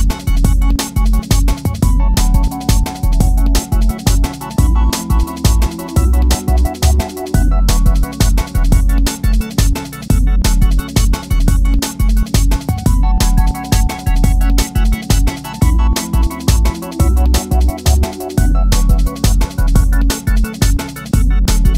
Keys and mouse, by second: 1.9 alt+click, 3.3 click, 3.7 g, 3.9 click, 4.2 alt+middle drag, 4.7 alt+click, 5.7 g, 7.1 click, 11.0 click, 11.3 shift+click, 13.9-19.4 alt+drag.